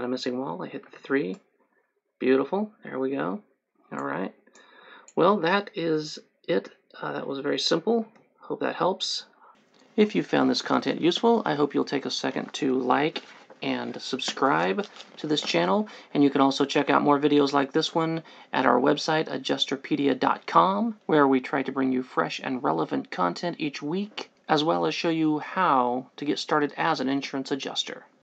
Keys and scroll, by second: 1.1 3, 8.2 Escape.